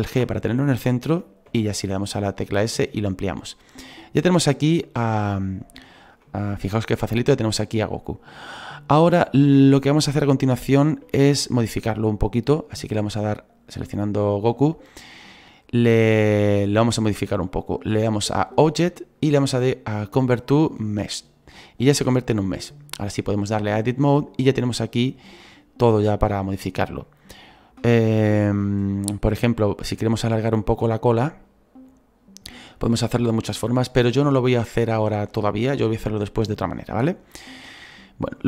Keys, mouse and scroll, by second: 5.4-10.3 scroll up 2, 10.3-13.7 scroll up 1, 13.7-15.3 scroll up 1, 15.3-21.2 scroll up 1, 21.2-23.8 scroll up 1, 23.8-24.7 scroll up 1, 24.7-27.0 scroll up 1, 27.0 scroll up 1, 27.2-38.4 middle drag.